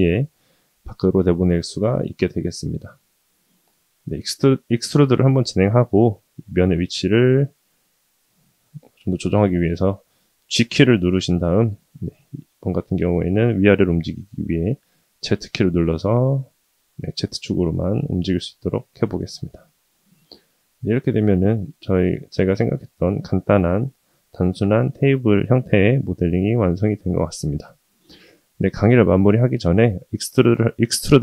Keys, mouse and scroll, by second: 2.6-3.8 middle drag, 4.9 KP_1, 9.3 g, 23.0-25.2 middle drag, 25.5-27.6 scroll down 1, 29.6-30.1 shift+middle drag.